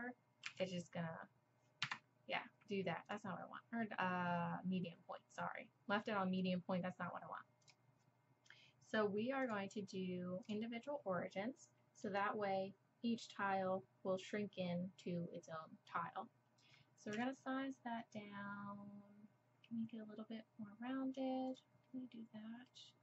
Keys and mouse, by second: 0.5 s, 3.1-4.8 drag, 9.5-10.4 drag, 11.2 middle click, 13.5 middle click, 17.1 s, 21.8-23.0 middle drag.